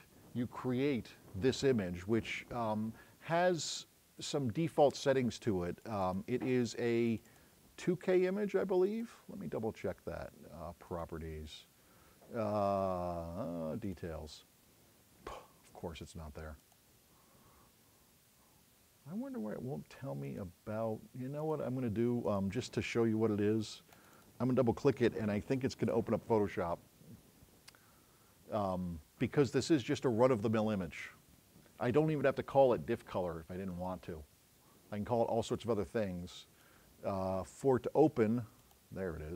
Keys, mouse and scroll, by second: 3.7 click, 5.9 click, 7.1 click, 8.9 right click, 10.9 click, 13.9 click, 16.7 click, 35.6-38.9 drag.